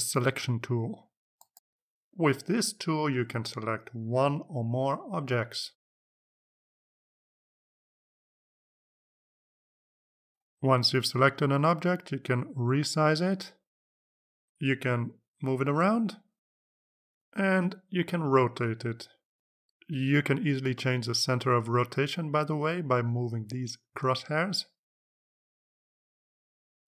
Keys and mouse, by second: 2.9 click, 5.7 click, 6.4 click, 7.3 click, 7.6-9.5 drag, 11.2 click, 11.6 click, 12.4-14.4 drag, 15.2 click, 16.9-18.9 drag, 20.2-23.0 drag, 24.4-26.5 drag.